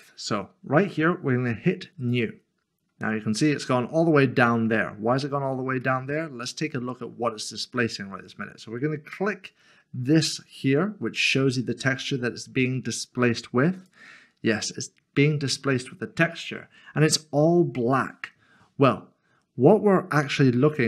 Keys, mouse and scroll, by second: 2.0 click, 3.7 middle click, 13.8 click.